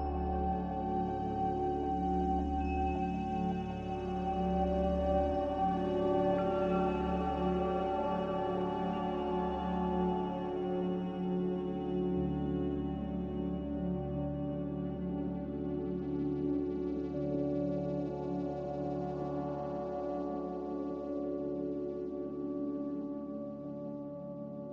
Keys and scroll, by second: 1.6 5, 1.8 Return, 4.7-5.4 typing, 7.0 Return, 7.0 5, 10.1 g, 14.6 z, 16.8 a, 17.2 Delete, 19.5 z, 21.5 2, 21.8 Return.